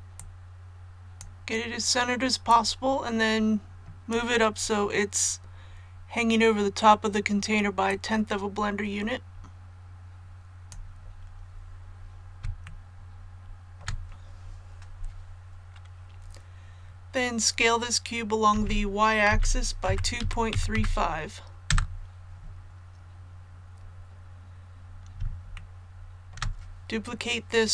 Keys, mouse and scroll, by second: 4.5 scroll up 1, 7.9-11.1 drag, 11.1 scroll down 1, 12.6 shift+middle click, 18.5-20.7 typing, 25.5 shift+middle click, 26.3 shift+scroll up 1, 26.3-26.7 shift+scroll down 2, 26.7 scroll up 1, 26.7 scroll down 1, 26.8 scroll up 1, 26.9 scroll down 1.